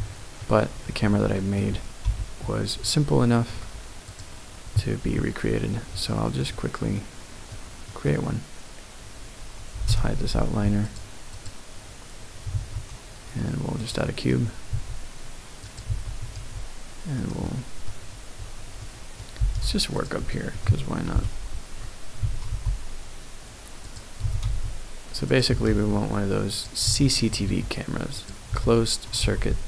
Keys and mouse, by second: 0.3 middle click, 1.3 shift+middle click, 2.0 KP_Decimal, 2.8 shift+click, 2.9 shift+middle click, 3.0 shift+click, 3.1 shift+middle click, 3.1 shift+click, 4.1 click, 6.1 shift+click, 6.9 middle click, 7.0 click, 7.1 middle click, 7.2 click, 7.3 middle click, 7.4 click, 7.8 middle click, 8.0 click, 9.9 n, 11.0 click, 11.3 click, 12.5 shift+a, 14.7 s, 15.6 click, 15.9 s, 16.3 x, 17.2 click, 17.4-17.8 middle drag, 18.8-19.1 middle drag, 19.4 g, 19.5 z, 19.9 click, 20.3 middle click, 21.1 KP_Decimal, 22.2 s, 22.5 t, 23.0 y, 23.8 click, 24.2 s, 24.4 x, 25.3 click, 25.5 s, 25.7 z, 26.5 click, 26.8 s, 27.4 x, 28.2 click, 28.5 s, 29.2 y.